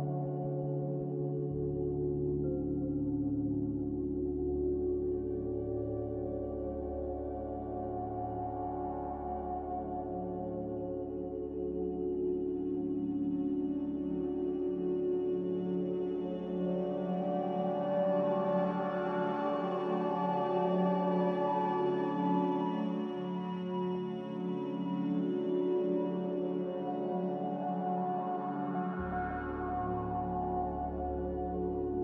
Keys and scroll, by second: 5.5 5, 6.5 2, 24.9 g, 30.5 z.